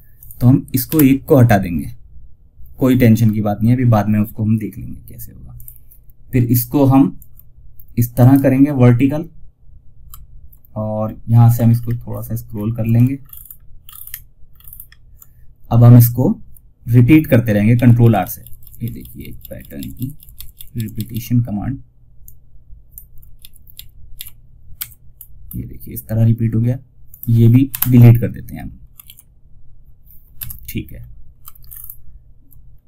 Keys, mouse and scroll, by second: 4.8 click, 7.5 ctrl+right click, 10.3 scroll down 1, 11.0 alt+scroll down 1, 12.1 typing, 12.5 ctrl+scroll up 1, 17.0 ctrl+r, 21.5 click, 22.7 ctrl+r, 24.4 scroll up 1, 26.4 click, 28.3 ctrl+z, 30.1 scroll down 1, 30.9 alt+scroll up 1, 32.0 scroll down 1, 32.5 alt+scroll up 1.